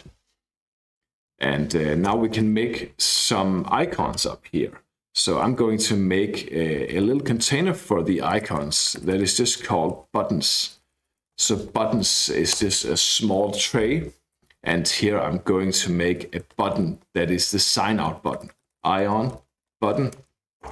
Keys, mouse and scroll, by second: 0.0-0.4 typing, 2.1 Return, 6.5-12.0 typing, 12.6 Return, 16.2-17.2 typing, 18.3-20.7 typing.